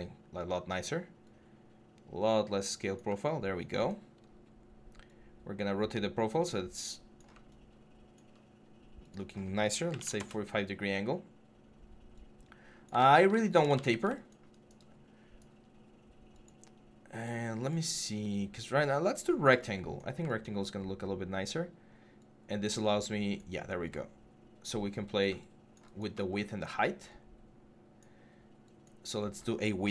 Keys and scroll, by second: 9.7 4, 9.8 5, 12.8 ctrl+z, 13.5 ctrl+z.